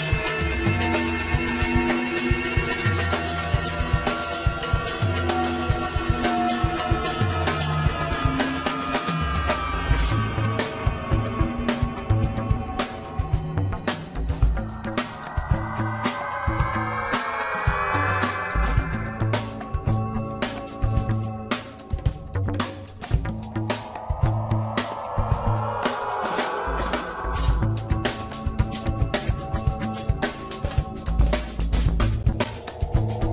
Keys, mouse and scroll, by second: 1.2 g, 3.0 scroll down 7, 3.8-4.3 shift+middle drag, 4.3 shift+z, 4.5 scroll down 2, 4.6-5.5 middle drag, 5.5 g, 7.0-7.9 scroll up 5, 7.3 shift+middle drag, 7.9-8.9 middle drag, 8.9-9.2 scroll down 10, 9.2 middle click, 10.0-13.0 drag, 14.9-15.2 scroll down 2, 15.2-16.0 middle drag, 16.0-16.6 scroll up 7, 17.1-18.0 middle drag, 18.0-18.5 scroll up 6, 20.1 g, 22.9-23.4 scroll down 10, 23.6-24.4 middle drag, 24.4 KP_1, 25.6-26.3 shift+middle drag, 26.3-27.2 scroll up 2, 27.2 scroll up 1, 27.4-30.1 shift+middle drag, 30.1-33.2 drag.